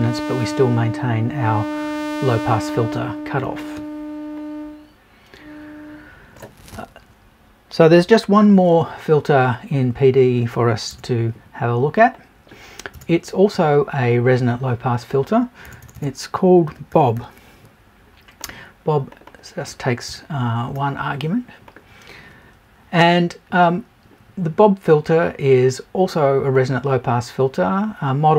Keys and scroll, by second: 10.9 BackSpace, 12.9 BackSpace, 15.6 BackSpace, 20.0 BackSpace.